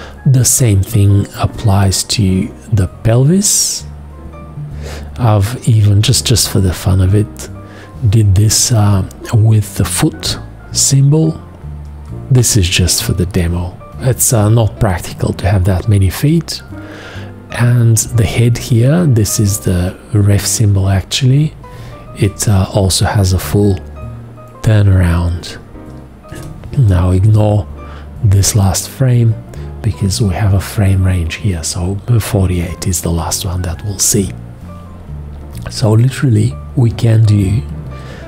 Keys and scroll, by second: 8.4 Return, 12.8 Return, 22.2 Return, 26.3 Return.